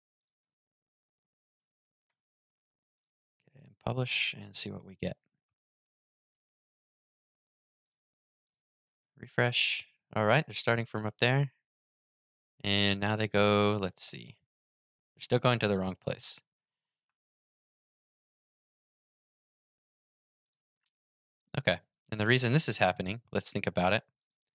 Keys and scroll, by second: 8.6 super+r.